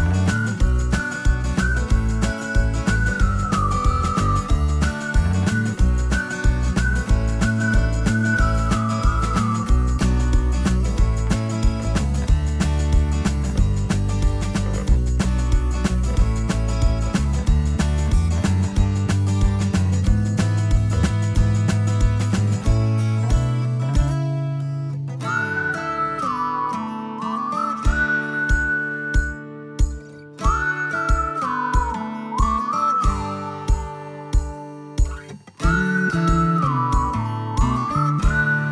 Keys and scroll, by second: 26.9 Delete, 28.3 ctrl+z.